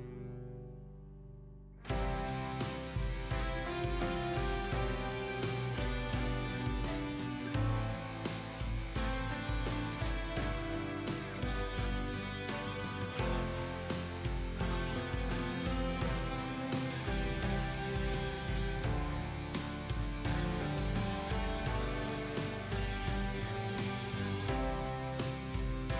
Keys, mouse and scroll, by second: 0.6-1.0 scroll up 1, 1.0 click, 1.3 scroll up 1, 1.7 click, 3.0 shift+click, 3.4 scroll down 1, 3.9-7.7 shift+drag, 8.1 scroll up 1, 8.5 click, 9.4 scroll down 1, 9.8 click, 10.3-10.8 scroll down 1, 11.2 scroll up 1, 11.8-15.1 drag, 16.0 shift+Down, 16.2 shift+Down, 16.7 shift+Down, 20.4 shift+Up, 21.3 shift+click, 22.4 click, 23.4-23.9 scroll down 1, 23.9 click, 24.5-25.3 scroll up 1, 25.3 click.